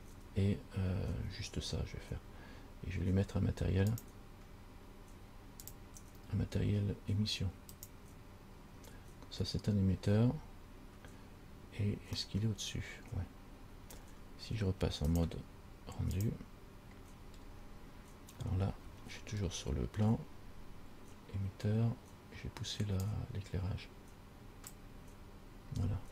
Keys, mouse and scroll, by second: 4.1 click, 5.8 click, 12.4 middle click, 15.3 click, 17.6-18.1 scroll up 3, 18.7-19.3 scroll up 5, 19.9 scroll up 2, 23.3 click.